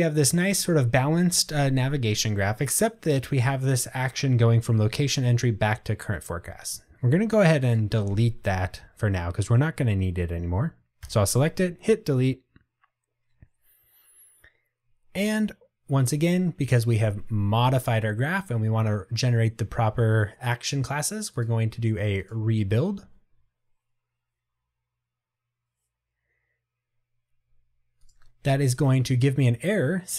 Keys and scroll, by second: 11.1 Delete.